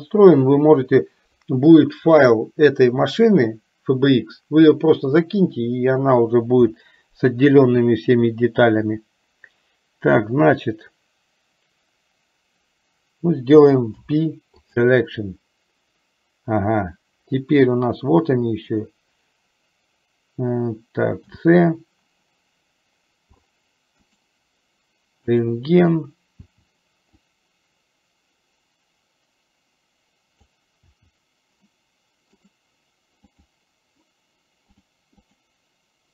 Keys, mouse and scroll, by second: 14.1 p, 21.2 c, 25.8 click, 26.4 c, 35.7 click.